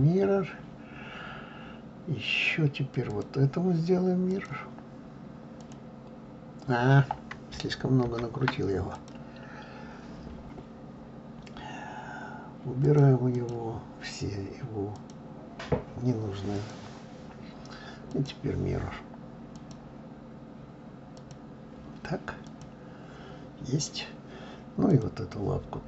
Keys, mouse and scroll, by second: 3.1 click, 4.3-7.3 drag, 8.1 ctrl+z, 8.9 click, 12.8 click, 13.3 click, 15.0-16.7 drag, 18.1-21.1 drag, 22.5 click, 24.9 click.